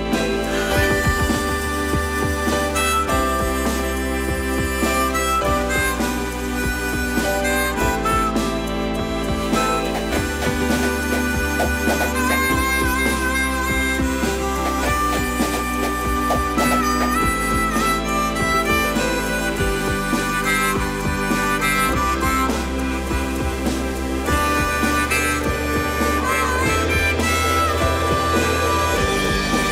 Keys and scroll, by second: 1.9 Escape, 2.3 space, 7.7 Escape, 12.0 m, 15.0 space, 21.8 space.